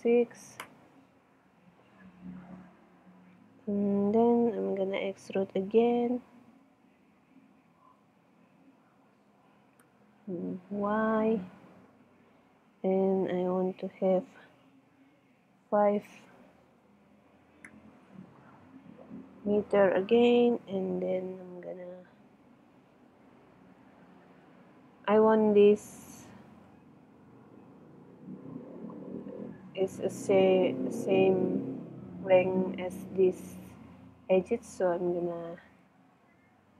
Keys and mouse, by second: 7.3-9.2 middle drag, 9.3 e, 16.7-17.7 middle drag, 18.8 middle click, 21.2 middle click, 22.8-26.0 middle drag, 26.7 e, 30.3 middle click, 32.4 middle click.